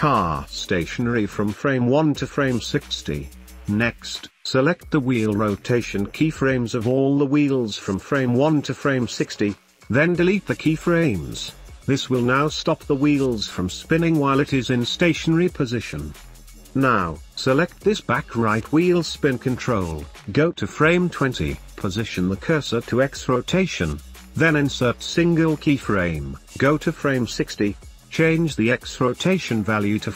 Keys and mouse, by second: 1.1 space, 2.7 space, 2.9 click, 4.0-5.7 drag, 7.6 x, 9.3 space, 9.6 ctrl+s, 9.6 space, 11.0 space, 14.9-16.0 drag, 14.9 space, 16.3 ctrl+s, 17.0 middle click, 17.0 space, 17.3-18.8 drag, 19.0 click, 19.8 ctrl+z, 20.7 click, 24.4 click, 27.6-28.8 drag, 28.3 KP_0, 28.5 KP_0, 29.3 click.